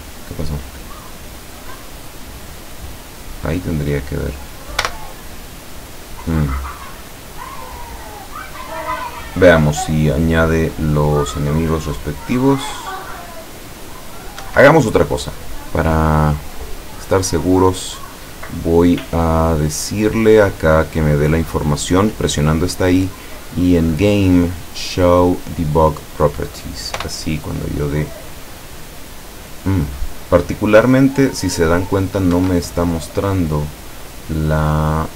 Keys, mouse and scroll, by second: 2.1 right click, 4.9 p, 14.5 Escape, 16.6 right click, 21.0 click, 23.9 click, 25.4 click, 27.0 p, 32.4 Escape, 34.9 click.